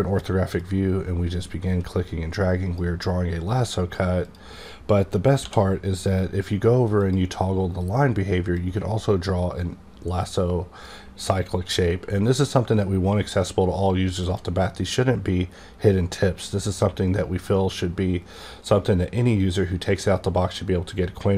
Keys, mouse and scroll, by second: 0.6-5.5 drag, 5.5 d, 7.0 click, 8.6-16.8 drag.